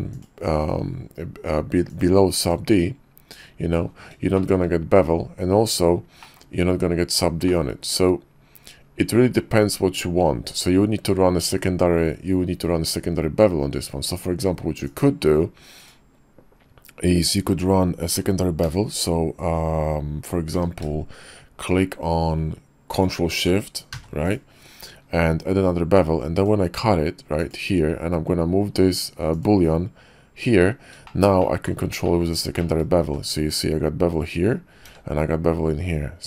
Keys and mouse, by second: 0.2 click, 1.9 drag, 2.4 click, 4.3 shift+middle click, 6.2 click, 7.5-7.9 drag, 14.9 click, 15.8 click, 18.6 q, 20.5 q, 24.2 click, 26.0-27.5 drag, 29.4 click, 31.4 middle click, 32.0 click, 32.6 shift+middle click, 33.0 q.